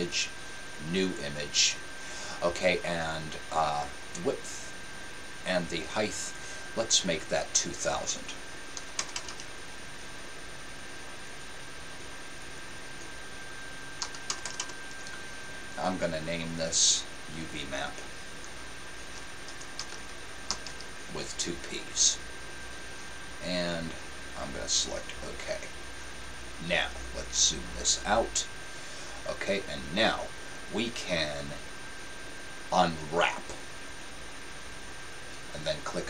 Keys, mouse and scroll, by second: 33.6-36.0 drag.